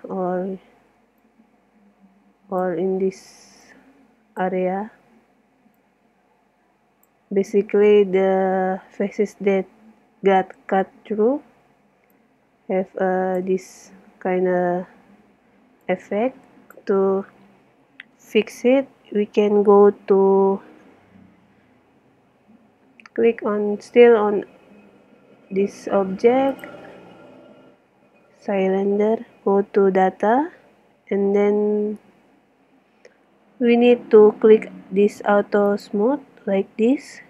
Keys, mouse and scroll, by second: 1.3 click, 1.5 middle click, 1.6 click, 1.7-3.1 middle drag, 1.8 click, 3.6 middle click, 4.2-5.4 drag, 5.8-7.4 drag, 8.0-10.5 middle drag, 12.2 middle click, 12.2 click, 12.3 middle click, 12.7-13.9 drag, 15.9 click, 16.0 middle click, 16.4 click, 16.5 click, 16.6 middle click, 26.6-28.5 drag, 35.7-37.2 drag.